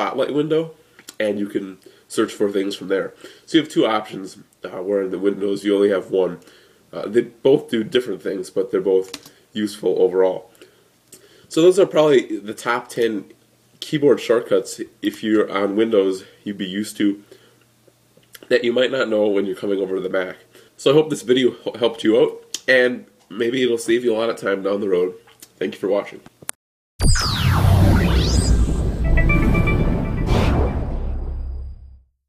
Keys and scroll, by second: 8.9 super+space.